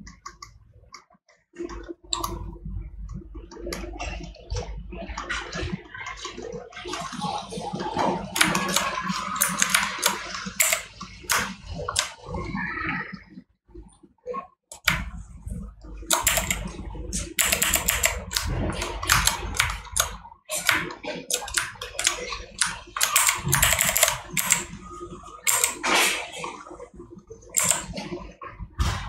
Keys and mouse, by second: 11.7 right click, 18.6 right click, 21.9 right click.